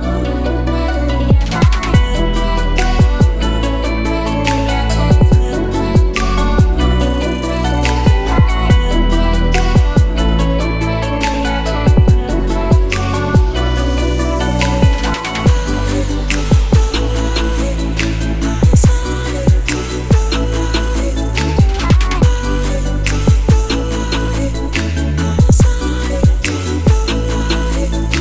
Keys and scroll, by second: 2.9-6.7 typing, 6.8 Return, 17.6-21.4 typing.